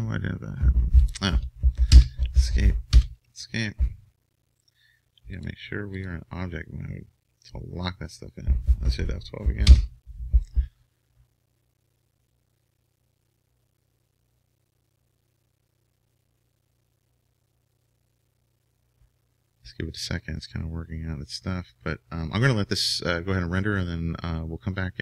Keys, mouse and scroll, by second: 3.0 Escape, 6.4-25.0 drag.